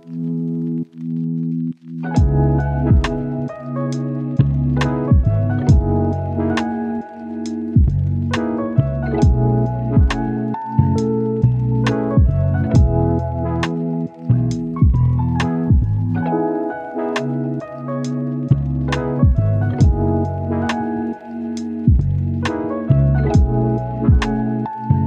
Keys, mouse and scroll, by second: 0.1 click, 1.0 right click, 1.5 scroll down 1, 1.7-4.0 right drag, 4.4 click, 4.8 right click, 5.7-6.0 scroll down 1, 6.0-6.4 scroll up 1, 6.4 scroll down 1, 6.5-7.0 scroll up 1, 8.0 right click, 8.9-9.8 scroll down 1, 9.8 click, 13.5 right click, 13.8-14.2 scroll up 1, 14.2 click, 14.3 scroll down 1, 14.5-15.5 scroll up 1, 15.5 click, 15.8-16.3 scroll up 1, 16.3-19.3 drag, 19.9-20.4 scroll down 1, 20.4-21.5 scroll up 2, 20.6 click, 21.5 click, 21.6-22.0 scroll down 1, 22.0 scroll up 1, 22.2 right click, 22.5 scroll up 1, 22.6 right click, 22.8 scroll down 1, 22.8 scroll up 1.